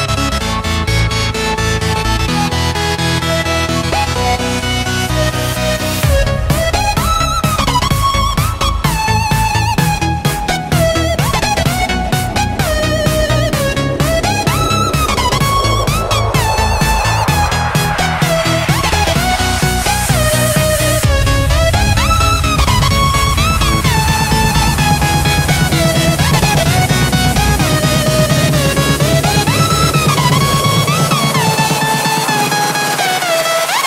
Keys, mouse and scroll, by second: 0.0-1.3 typing, 2.4 click, 3.7 F10, 4.2 click, 4.7-6.0 typing, 6.5-7.8 drag, 8.0 F10, 9.1-16.4 drag, 16.4 right click, 17.5 Tab, 18.6 click, 23.2-25.5 typing, 26.2 click, 26.8 BackSpace, 27.0 Return, 27.4 click, 30.2-32.0 typing, 32.6-33.8 drag.